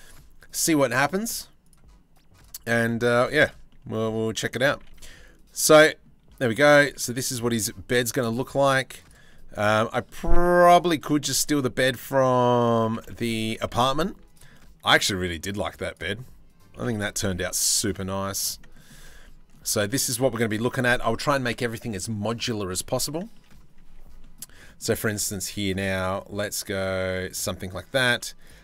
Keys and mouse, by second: 0.9 click, 2.3 click, 2.6 Tab, 3.3 middle click, 4.3 g, 5.4 click, 5.9 middle click, 7.6 click, 7.9 e, 8.9 middle click, 9.4 middle click, 9.6 middle click, 11.0 click, 11.2 middle click, 12.4 g, 14.1 middle click, 14.6 middle click, 16.3 g, 18.2 middle click, 18.8 Tab, 18.9 middle click, 19.2 Tab, 19.4 middle click, 20.2-22.7 middle drag, 24.0 middle click, 24.4 middle click, 24.8 ctrl+r, 27.2 click.